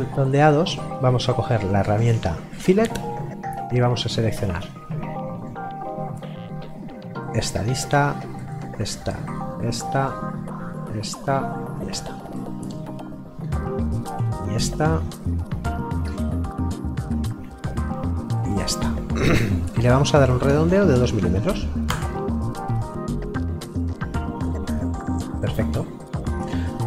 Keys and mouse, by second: 1.4 click, 12.4 middle click, 14.0 click, 16.1 middle click, 18.3 click, 20.5 KP_2, 21.9 Return, 22.9 middle click.